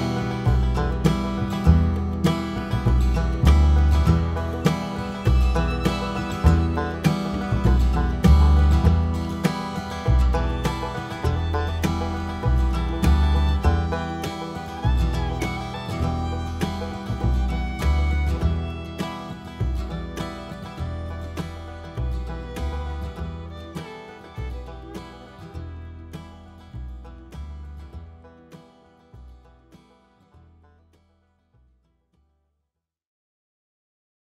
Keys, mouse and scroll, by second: 0.0 `, 0.3 scroll up 1, 0.5 scroll down 1, 1.5 KP_1, 1.7-2.2 scroll up 1, 2.2 `, 2.7 scroll down 1, 2.9 KP_7, 3.1 scroll up 1, 3.2-3.7 scroll down 1, 3.7-6.3 drag, 9.8-12.6 drag, 12.7 g, 13.7 alt+a, 14.1 click, 16.3-17.3 drag, 17.3 `, 18.9-25.1 drag, 19.9 `, 21.2 KP_7, 25.0 s, 25.3 click, 26.1 a, 26.5 click, 26.9 z, 27.0 click, 28.4 click, 30.5 r, 33.3 click, 33.3 r.